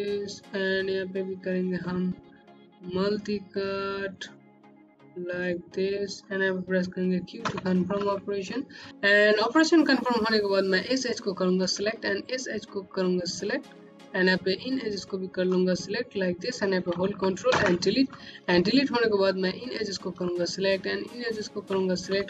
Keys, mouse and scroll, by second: 4.2 click, 5.0 right click, 7.3 q, 8.5 scroll up 1, 8.9 click, 11.0 click, 12.7 click, 15.5 click, 17.4 Delete, 19.2 click, 21.0 click.